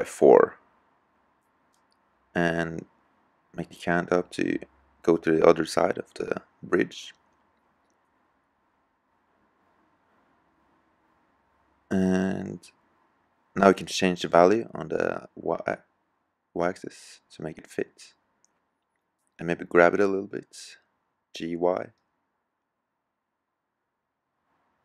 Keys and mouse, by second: 0.8-1.9 middle drag, 3.7 KP_3, 10.8 middle click, 15.4 click, 16.5-17.2 middle drag, 21.3 KP_3, 23.8 g.